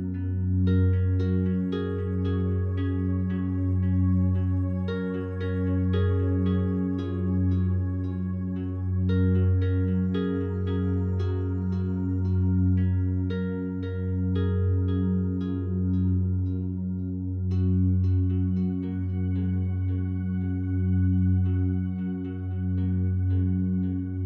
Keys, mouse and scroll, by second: 0.5-3.0 drag, 3.0 a, 3.2 a, 12.1 a, 23.2-24.2 alt+drag.